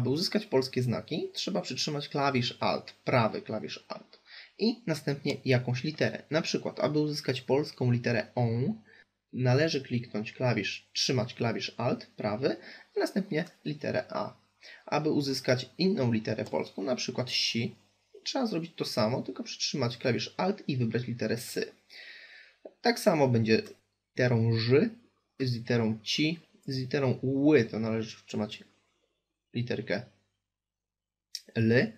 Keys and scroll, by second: 11.5 alt+a, 18.9 alt+s.